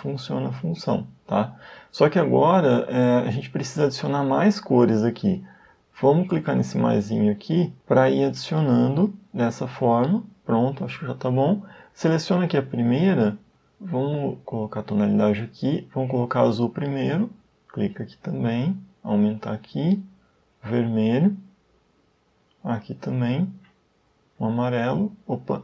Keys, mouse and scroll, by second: 0.7 click, 2.3 click, 4.2 click, 5.3 click, 7.5 click, 9.8 click, 11.1 click, 17.5 click, 18.3 click, 22.6 click, 23.4 click.